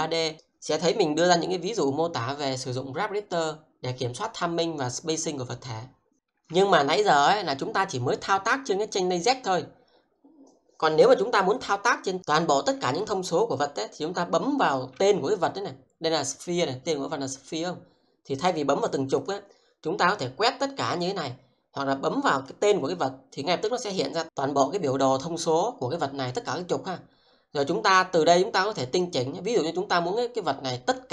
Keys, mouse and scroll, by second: 6.1 middle click, 11.5 click, 12.5-12.9 scroll down 1, 13.4-13.8 scroll up 1, 14.6 click, 18.4 click, 18.9 double click, 19.2 click, 20.4 click, 23.5 scroll down 1.